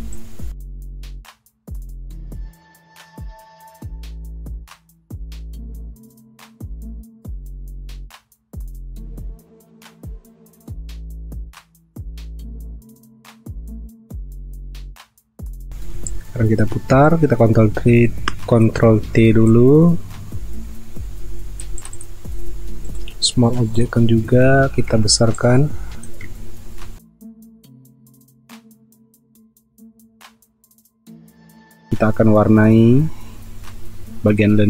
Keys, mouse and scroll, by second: 0.7 alt+click, 1.3 alt+click, 1.4 space, 1.8 alt+scroll down 1, 2.3 alt+click, 2.4 alt+scroll up 1, 2.9 alt+click, 3.3 alt+click, 3.5-4.2 alt+scroll up 2, 3.7 alt+click, 3.8 space, 4.4 alt+click, 4.7 space, 5.1 alt+click, 5.6 alt+click, 5.7-6.0 alt+scroll down 1, 6.0 alt+scroll up 1, 7.7 alt+click, 8.4 alt+click, 8.9 alt+click, 9.0 space, 9.1 alt+scroll up 1, 9.7 alt+click, 10.1 alt+click, 10.3 alt+click, 10.8 space, 11.0 alt+click, 11.3 space, 11.6 alt+click, 12.3 alt+click, 12.8 alt+click, 13.0-13.8 alt+scroll down 3, 14.1 p, 14.8 v, 16.4 ctrl+t, 24.5 ctrl+t, 25.3 shift+click, 26.3 alt+scroll down 1, 26.7 alt+scroll up 1, 27.3 alt+scroll up 1, 28.1-28.8 alt+scroll down 2, 28.8 alt+scroll up 1, 29.5 alt+scroll up 1.